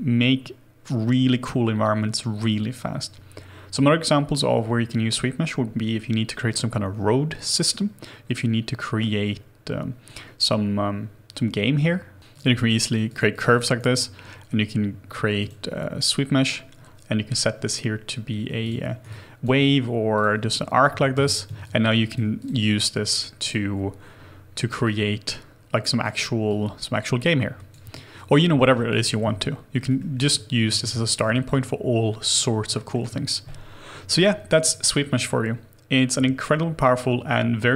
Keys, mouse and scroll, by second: 6.4-7.6 scroll down 1, 7.7 scroll up 1, 9.1-11.0 scroll down 1, 12.0 ctrl+z, 12.6 double click, 17.3-19.0 scroll up 1, 19.1 alt+click, 20.5 alt+click, 21.1 space, 21.6 alt+click, 28.6 alt+middle click, 28.9 alt+click, 29.3 shift+middle click, 30.0 alt+middle click, 30.7 alt+middle click, 30.9 ctrl+z, 31.3 alt+click, 32.8 alt+middle click.